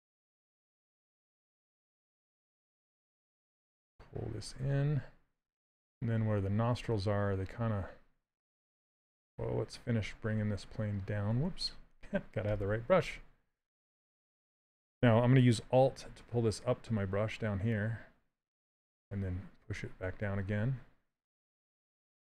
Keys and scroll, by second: 2.2 s, 6.4 s, 11.6 ctrl+z.